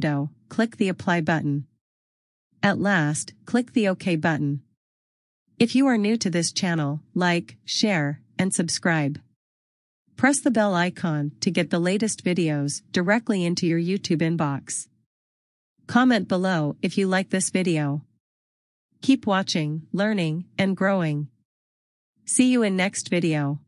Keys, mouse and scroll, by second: 2.6 click, 4.9 click, 7.4 click.